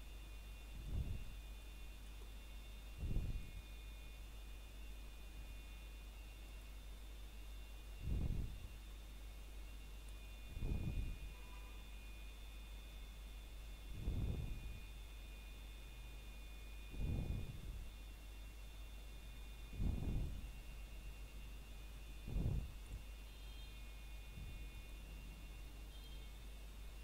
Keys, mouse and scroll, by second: 0.7 click, 8.7 click, 9.3 middle click, 9.7 scroll up 1, 10.1 shift+middle click, 10.9 scroll down 1, 12.0 middle click, 12.8 scroll down 1, 13.6 shift+middle click, 15.5 e, 19.1 click, 19.4 scroll down 1, 20.2 middle click, 20.6 scroll up 1, 21.2 middle click, 21.8-22.2 scroll up 1, 21.8 typing, 22.4 shift+middle click, 23.8 scroll up 1, 26.5 middle click.